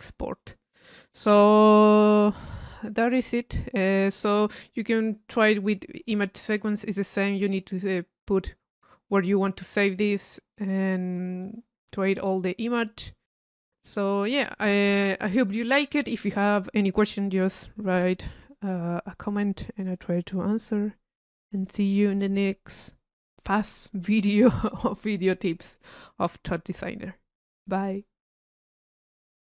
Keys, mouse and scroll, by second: 0.6 click, 2.3-4.5 drag, 5.4 click, 6.3 click, 7.6 click, 10.0 click, 10.6 click, 11.2 click, 12.3 click, 13.1-14.2 drag, 14.3-15.6 drag.